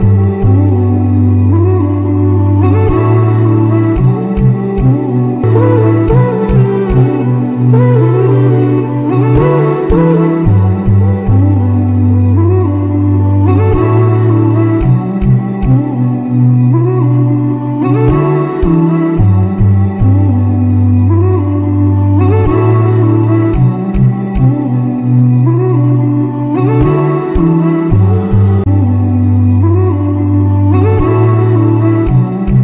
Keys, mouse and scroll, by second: 0.6 click, 2.4 click, 4.1 click, 10.4 click, 13.8-14.7 middle drag, 14.7-15.9 scroll down 6, 15.9 click, 17.2-19.1 drag, 19.8-22.6 middle drag, 22.6-32.6 drag.